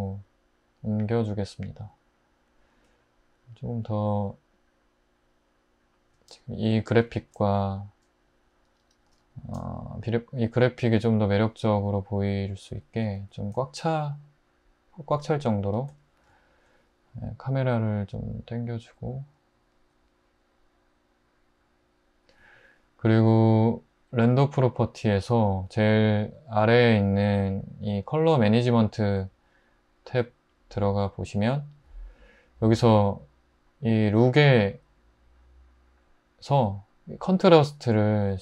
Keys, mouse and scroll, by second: 6.3 click, 6.5-7.9 middle drag, 7.9 click, 9.1 typing, 13.2-15.6 middle drag.